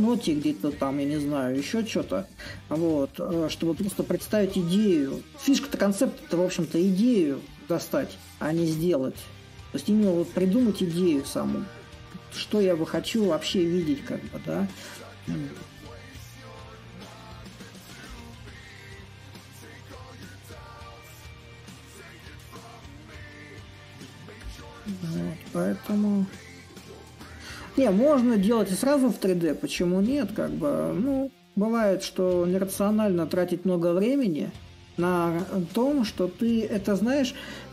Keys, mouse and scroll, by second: 0.5-5.0 drag, 5.8-10.9 drag, 11.1-16.2 drag, 17.8-19.4 drag, 19.4 s, 21.4-26.5 drag, 26.8-31.9 drag, 32.7-37.7 drag.